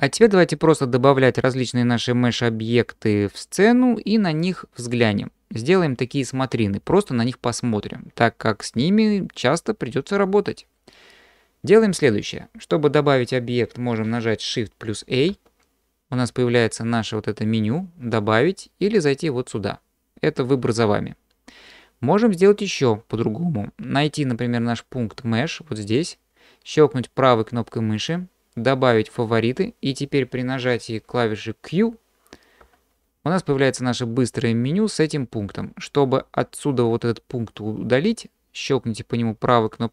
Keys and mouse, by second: 15.3 shift+a, 18.9-29.7 drag, 32.6 q.